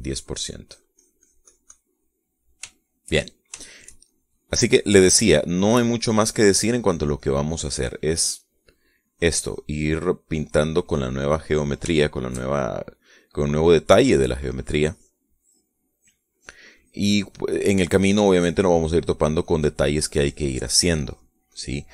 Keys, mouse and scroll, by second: 0.0-2.6 drag, 2.7 middle click, 3.4 shift+middle click, 4.8-7.8 shift+drag, 8.2 click, 9.0 middle click, 9.7 click, 10.6 click, 11.0 middle click, 12.1-13.5 middle drag, 13.7-16.5 shift+drag, 16.6 click, 18.3 middle click, 18.8-21.7 drag.